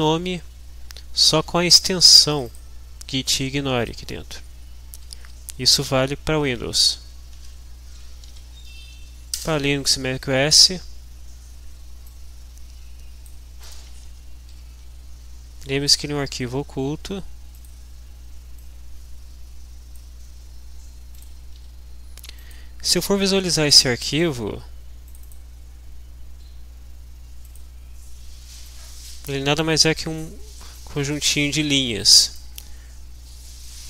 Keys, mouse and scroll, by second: 2.4-3.5 drag, 3.8 click, 4.9 Home, 7.0 Delete, 7.9 m, 8.3 v, 9.4 Return, 12.0-13.4 drag, 13.8 click, 14.5 ctrl+h, 17.7 click, 18.6-20.5 drag, 21.3 click, 21.6 ctrl+h, 22.5 click, 24.4 click, 25.2 click, 27.4 click, 28.6 click, 29.6 click, 30.8-32.6 drag.